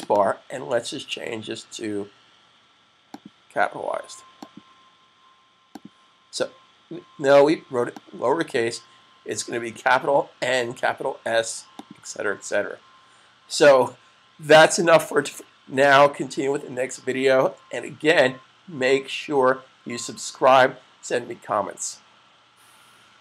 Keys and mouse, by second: 0.1 double click, 2.9 click, 9.5 super+s, 11.9 click, 12.1 click, 12.5 super+s.